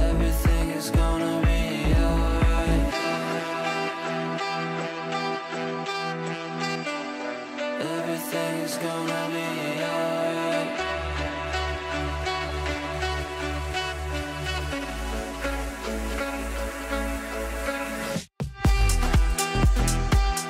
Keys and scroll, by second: 7.7 ctrl+r.